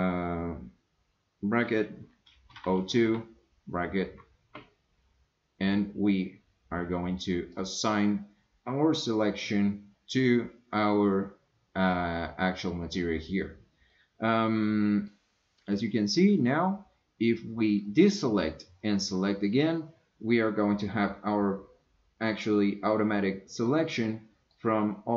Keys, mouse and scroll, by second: 7.5 click, 13.9 scroll down 1, 14.0-15.1 middle drag, 18.0 click, 23.7 scroll down 1, 23.8 middle click.